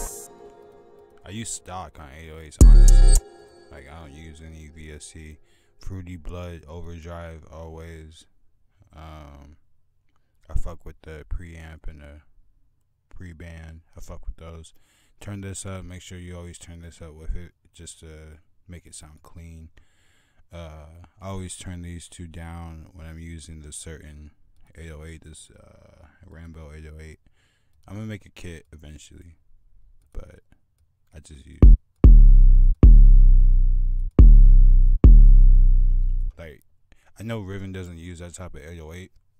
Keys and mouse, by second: 3.5-7.4 drag, 7.5 drag, 16.0 click, 16.3 click, 17.6 drag, 19.2 click, 24.0 drag, 25.0 click, 31.4 click, 31.7-36.6 drag, 38.0-39.3 drag.